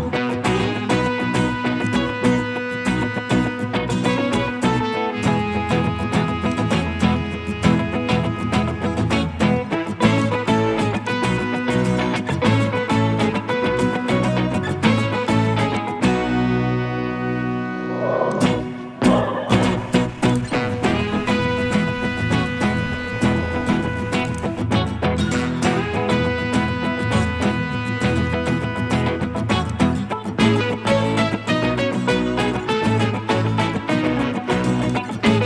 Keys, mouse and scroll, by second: 7.6 scroll up 1, 8.8 right click, 17.0 middle click, 25.6 middle click, 25.6 scroll down 1, 25.8 middle click, 30.6 middle click.